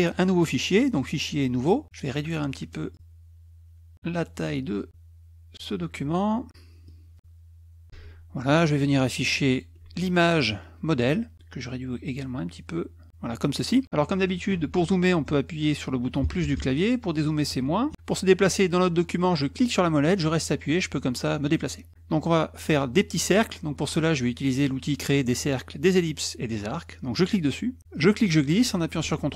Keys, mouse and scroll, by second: 1.0 click, 1.6 click, 2.1 alt+click, 2.9-4.4 alt+drag, 6.9-7.9 drag, 7.9 alt+Tab, 9.5 alt+click, 19.5-21.9 middle drag, 27.2 click, 27.9-29.3 drag.